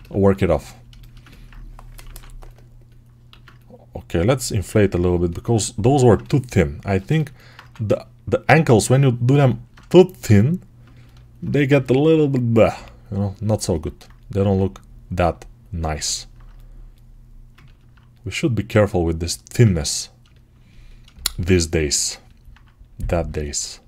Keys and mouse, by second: 1.9 6, 3.2 alt+q, 6.7-10.4 ctrl+alt+right drag, 7.4 1, 10.4-19.4 ctrl+alt+drag, 11.6 g, 19.4-23.8 ctrl+alt+right drag.